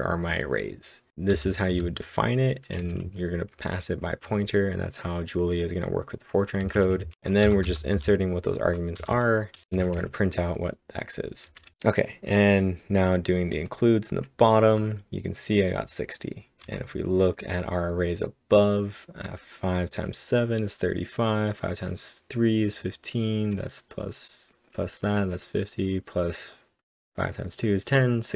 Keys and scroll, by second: 1.3-2.8 typing, 4.3 j, 6.8-8.0 typing, 11.5 k.